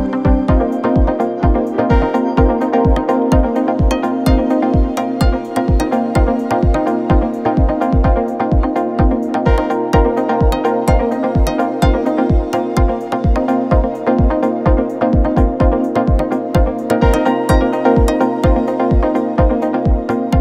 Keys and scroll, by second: 8.1 1, 13.3 4, 15.3 0, 15.3 Return, 17.0 3, 18.2 ctrl+F1.